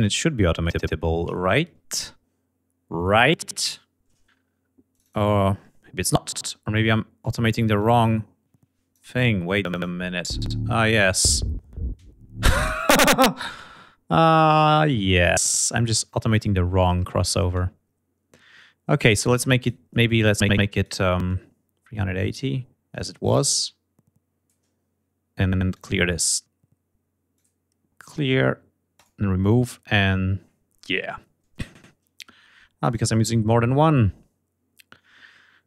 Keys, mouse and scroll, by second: 4.6 click, 7.4-8.7 drag, 9.2 click, 9.6 space, 11.7 space, 14.7 click, 18.3 click, 19.0 click, 20.3-23.6 drag, 24.3 click, 26.1 click, 26.7 right click, 27.5 click, 28.4 click, 31.2 scroll up 2, 32.2 click.